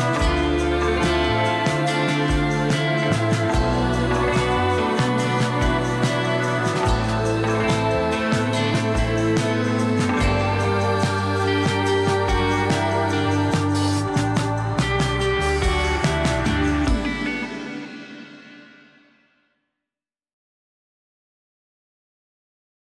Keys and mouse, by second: 0.0 s, 2.4 g, 7.4 g, 12.3 s, 14.6 s, 15.8 click, 16.7 s, 16.9 r, 19.7-20.9 drag, 21.3 click, 21.7 ctrl+Tab.